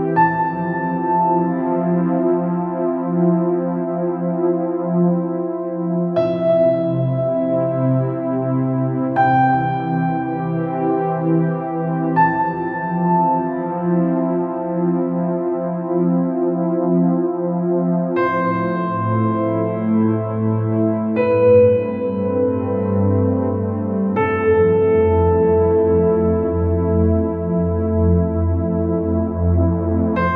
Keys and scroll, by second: 5.8 ctrl+z, 6.1 ctrl+z.